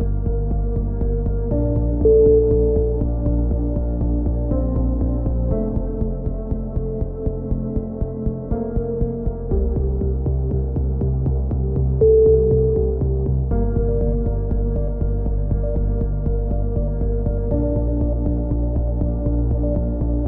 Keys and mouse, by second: 0.0-1.4 middle drag, 1.1 z, 1.4 click, 2.8-3.8 drag, 3.2-4.3 right drag, 3.8 x, 4.6 right click, 5.2 KP_3, 5.5 z, 7.5 z, 8.3 ctrl+z, 9.2 x, 10.3 right click, 11.0 e, 12.0-14.3 drag, 13.8 right click, 14.7-16.0 right drag, 14.7 f, 15.9 f, 16.0 a, 17.5 click, 17.6 right click, 18.3 a, 18.5 KP_3, 18.8 z, 19.1 z, 19.5 click.